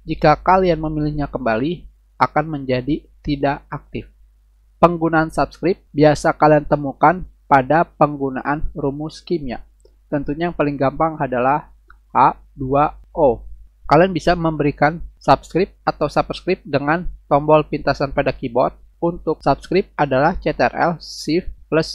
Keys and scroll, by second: 4.1 Delete, 5.2 Return, 12.1 shift+h, 12.6 2, 13.3 shift+o.